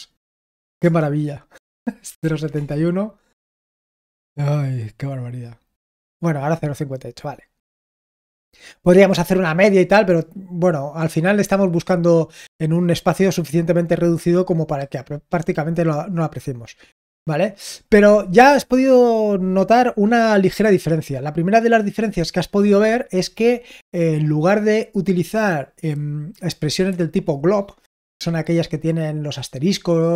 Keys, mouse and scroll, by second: 0.5 ctrl+p, 0.8 Return, 2.2 ctrl+p, 2.5 Return.